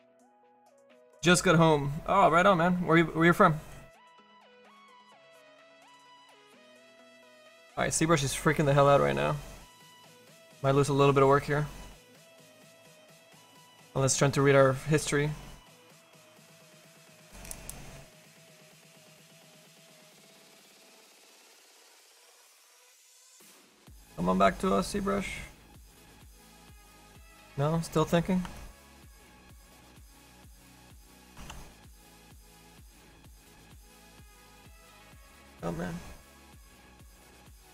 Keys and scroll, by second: 31.5 f.